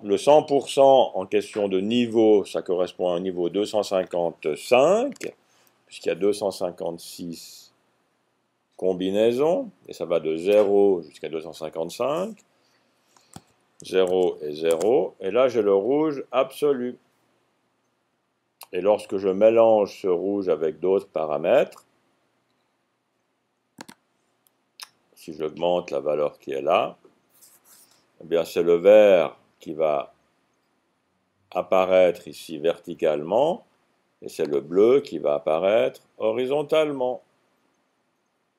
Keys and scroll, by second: 5.1 5, 13.2 Tab, 13.7-14.6 typing, 25.2 Up, 25.7-26.1 typing, 26.2-26.7 Up, 26.9 Up, 29.6-30.0 typing, 35.1 Up, 35.6 Up, 35.7 typing, 35.8-37.2 Up.